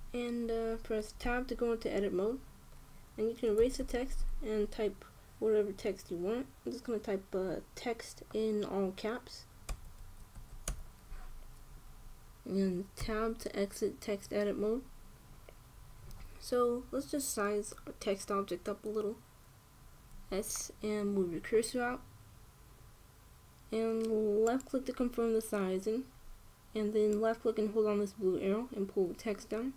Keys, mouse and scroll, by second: 1.9 Tab, 4.3 BackSpace, 4.5 BackSpace, 4.7 BackSpace, 4.9 BackSpace, 10.4 t, 10.7 e, 11.0 x, 11.4 t, 13.7 Tab, 20.8 s, 27.8-29.7 drag.